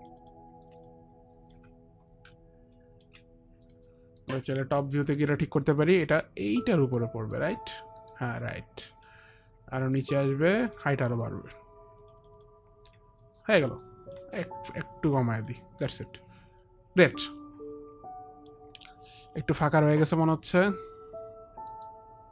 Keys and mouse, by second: 0.3 click, 2.6 alt+click, 6.0 alt+click, 6.0 middle click, 7.5 middle click, 8.1 middle click, 8.1 click, 8.6 alt+click, 9.9 alt+click, 12.2 alt+click, 12.5 alt+click, 13.4 alt+click, 15.6 alt+click, 16.1 alt+click, 16.4 alt+click, 16.8 alt+click, 20.6 middle click, 21.8 middle click.